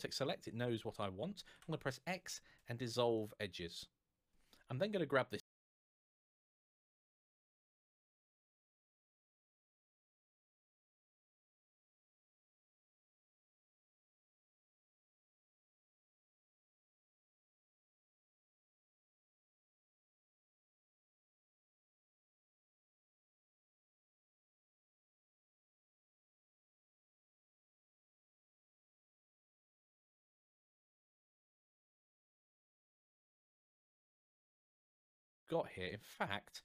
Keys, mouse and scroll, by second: 1.3 x, 34.5 scroll down 1, 35.3-36.6 scroll up 1.